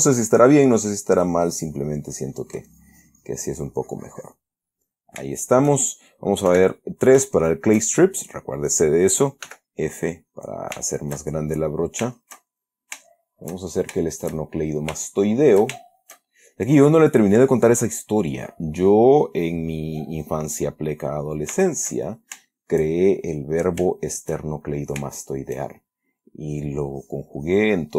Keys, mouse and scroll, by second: 2.3-2.8 middle drag, 3.0-4.9 drag, 4.9-5.3 middle drag, 5.7-6.1 shift+middle drag, 6.8 3, 7.6-8.1 shift+middle drag, 9.8 f, 10.3 click, 11.1-11.6 shift+middle drag, 12.1-13.3 shift+middle drag, 13.4-14.3 shift+middle drag, 14.7-15.9 shift+middle drag, 16.1-16.6 shift+middle drag, 16.9-18.2 drag, 18.7 click, 19.1-21.0 drag, 21.4 middle click, 22.0-22.8 shift+middle drag, 22.9 shift+middle click, 23.5-23.9 shift+middle drag, 24.3-24.8 shift+middle drag, 25.1 shift+middle click, 25.5-25.9 shift+middle drag, 26.8 click, 27.2-27.9 drag.